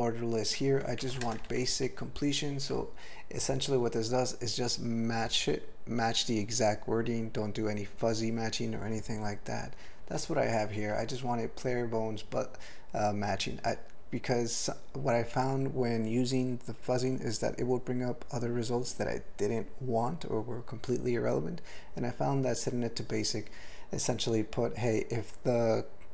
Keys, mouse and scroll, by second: 1.0 alt+b, 1.3 ctrl+space, 1.5 ctrl+alt+f, 1.8 ctrl+g, 2.4 ctrl+f, 10.6 alt+b.